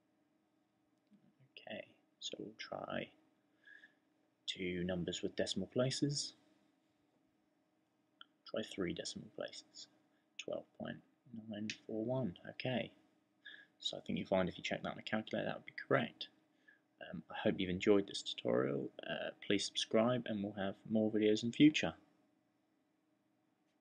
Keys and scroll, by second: 2.4-3.9 typing, 5.0-7.4 typing.